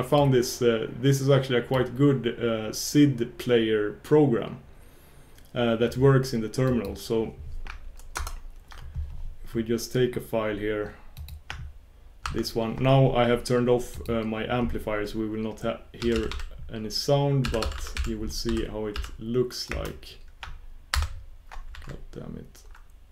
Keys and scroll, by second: 8.1 ctrl+super+Return, 8.3 ctrl+super+Return.